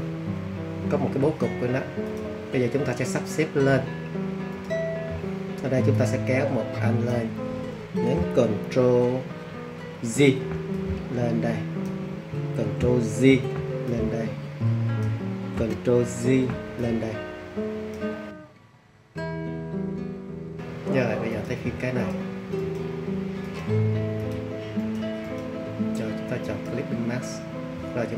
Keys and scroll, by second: 10.1 super+j, 13.2 super+j, 16.2 super+j.